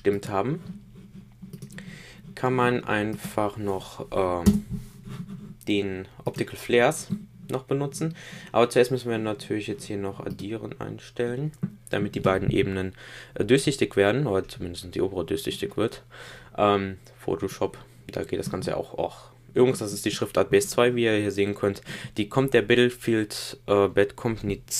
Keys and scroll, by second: 4.4 Return.